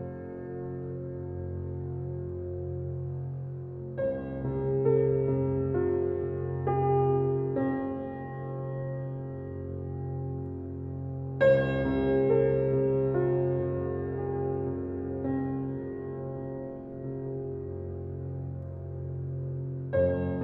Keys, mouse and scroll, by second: 0.0 shift+middle click, 0.6 shift+middle click, 1.6 shift+scroll up 1, 1.8 alt+shift+click, 3.1 ctrl+z, 3.7 click, 5.3 alt+shift+click, 5.6-6.1 scroll down 10, 6.1 shift+middle click, 6.7 g, 9.0 alt+middle click, 9.7 scroll down 2, 9.9 shift+middle click, 10.2-11.1 scroll up 10, 10.5 shift+middle click, 11.1 shift+middle click, 12.0 ctrl+b, 14.0 ctrl+b, 16.4-17.7 middle drag, 17.7 g, 18.9 g, 20.2-20.4 scroll down 3.